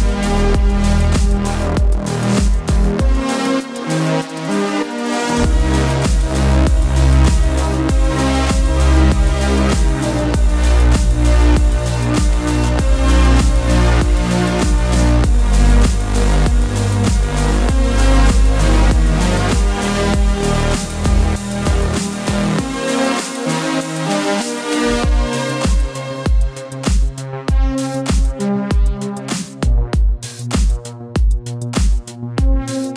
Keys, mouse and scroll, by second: 0.8 middle click, 1.6 click, 3.4 shift+click, 4.1 click, 4.7 alt+click, 5.4-8.0 middle drag, 8.0-8.4 drag, 8.4-9.8 middle drag, 9.8-10.2 scroll down 2, 10.2-11.9 middle drag, 11.9-12.4 scroll down 2, 12.4-13.8 middle drag, 13.8 /, 14.4-15.9 middle drag, 15.9 click, 16.7 KP_Decimal, 17.3-17.9 scroll down 10, 17.9-19.3 middle drag, 19.3 click, 20.9 click, 21.4 scroll down 1, 21.7-22.8 middle drag, 22.8 ctrl+click, 23.7-24.1 drag, 24.1 scroll down 2, 24.3 middle click, 25.2-25.5 scroll up 2, 25.5 middle click, 26.2 alt+a, 27.0-28.1 drag, 28.1-29.5 middle drag, 29.5-30.0 scroll up 1, 30.0-32.9 middle drag.